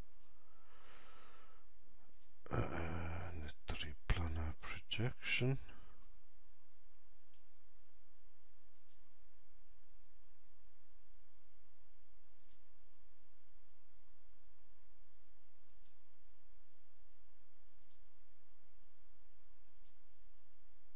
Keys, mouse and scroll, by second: 5.9 alt+right click, 8.6 click, 12.3 click, 12.3 alt+right click, 15.6 click, 19.9 click.